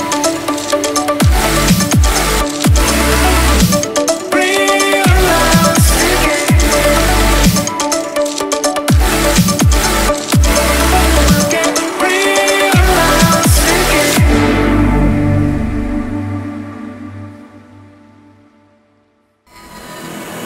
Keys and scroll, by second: 15.2-16.0 typing, 19.6 ctrl+s.